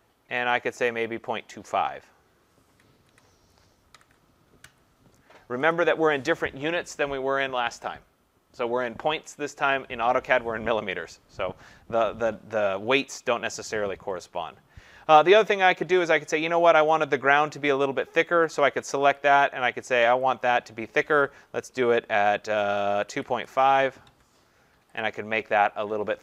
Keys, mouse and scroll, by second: 0.5 click, 1.7 click, 3.1-4.6 typing, 5.7 click, 12.9-14.5 scroll up 12, 14.5 scroll down 1, 14.7 scroll down 3, 14.8-16.4 scroll, 16.9 click, 19.2 click, 20.7 click, 22.7-23.8 typing, 24.0 Tab, 25.0 click.